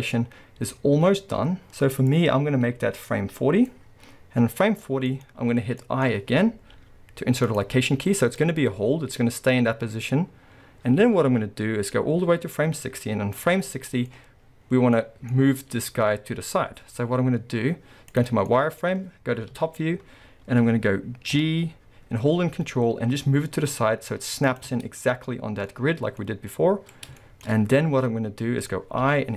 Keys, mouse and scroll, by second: 4.8-5.8 scroll down 4, 5.1-8.4 middle drag, 8.4-13.7 drag, 13.6 scroll down 2, 13.7-24.6 middle drag, 14.1-14.7 scroll up 2, 14.7 scroll down 1, 15.7 z, 19.5 KP_7, 20.3-21.3 scroll up 2, 21.3 scroll up 1, 21.3 g, 25.3-29.3 middle drag, 27.6-29.0 scroll.